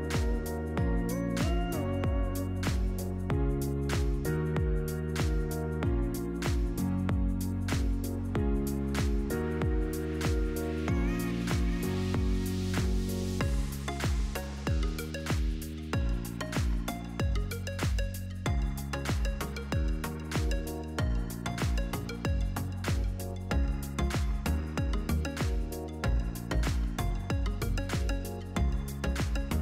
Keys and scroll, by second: 12.9-14.2 typing, 22.8 ctrl+v, 27.6 8, 28.6 Return.